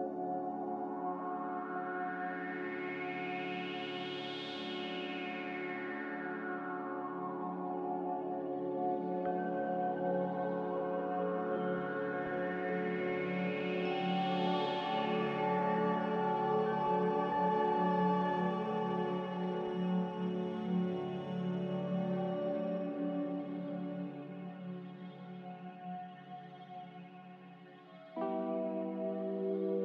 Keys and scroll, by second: 1.9 Escape, 6.0 b, 10.1 m, 13.5 b, 15.7 a, 23.4 ctrl+j.